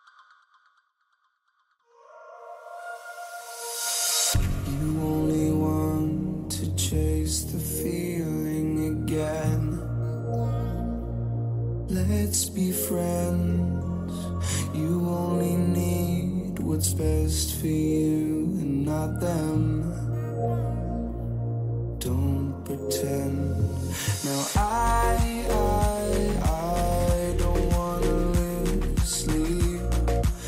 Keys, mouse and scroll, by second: 2.0-4.8 middle drag, 9.7 middle click, 10.7-12.7 drag, 14.2-16.0 middle drag, 16.0-18.2 drag, 16.9-20.3 middle drag, 18.2 KP_1, 20.4-22.2 drag, 25.5-29.1 middle drag, 29.6 a.